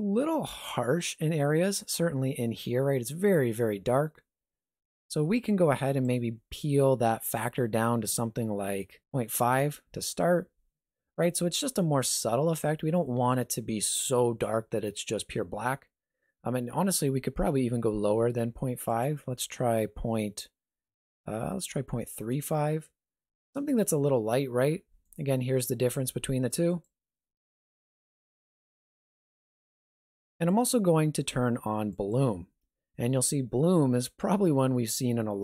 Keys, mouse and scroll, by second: 5.9 click, 18.9 click, 25.1 click, 26.7 click, 30.5 click, 32.0 click.